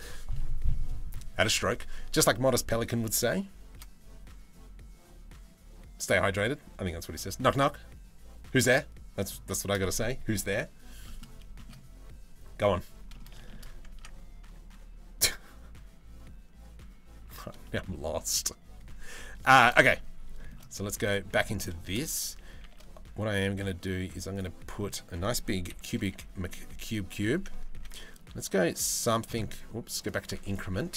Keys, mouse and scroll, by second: 9.1 shift+middle drag, 10.6 middle click, 11.2 shift+middle click, 12.7 middle click, 13.5 Tab, 16.8 Tab, 17.2 middle click, 20.0 shift+middle click, 20.7 right click, 21.2 middle click, 22.2 shift+a, 25.3 KP_3, 25.6 KP_1, 26.8 g, 29.8 click, 30.5 g.